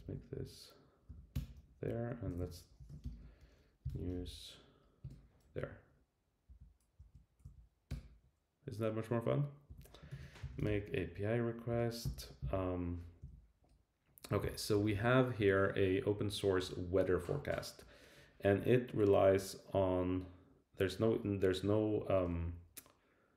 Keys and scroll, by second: 1.0 Up, 1.3 Return, 1.8 Up, 2.3 shift+super+Right, 5.0 Return, 6.4 Down, 7.0 Right, 7.9 Return, 9.7 Down, 11.7 Return, 13.2 Down, 14.7 shift+super+].